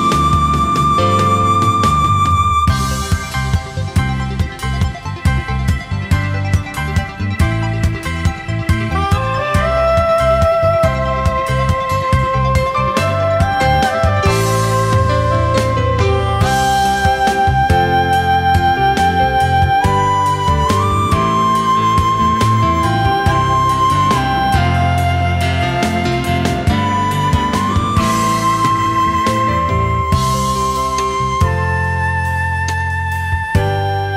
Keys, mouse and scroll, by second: 1.3 alt+scroll down 1, 1.5 space, 2.3 alt+scroll up 1, 3.8 space, 10.9 alt+scroll down 1, 11.1 space, 12.8 alt+scroll down 1, 13.0 space, 14.1 shift+click, 14.9 shift+click, 15.7 shift+click, 16.0 space, 16.6 alt+scroll up 1, 17.3 shift+click, 17.7 alt+scroll down 1, 17.9 space, 18.6 alt+scroll up 1, 19.4 shift+click, 20.2 space, 21.2 alt+scroll down 1, 21.4 space, 22.3-22.6 alt+scroll up 1, 28.3 space, 29.8 alt+scroll up 1.